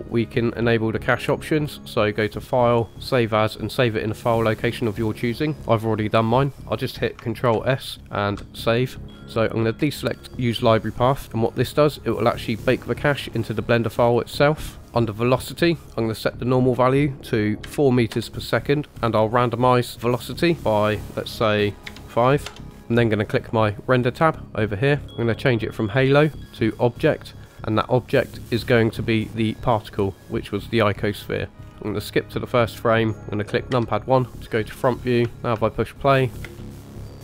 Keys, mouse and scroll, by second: 0.2 click, 2.3-3.5 drag, 7.5 ctrl+s, 9.0 scroll down 2, 9.8 click, 14.8 scroll down 3, 15.0 click, 15.6-16.3 scroll down 2, 16.3-18.1 drag, 19.9 click, 22.8-23.7 scroll up 2, 23.7 click, 24.9-25.3 scroll down 2, 25.3-26.8 drag, 27.5-28.2 scroll down 2, 28.3-30.0 drag, 31.7 scroll up 2, 31.7 click, 33.7 KP_1, 35.2-35.5 scroll down 3, 35.7-36.0 shift+middle drag, 36.4 space.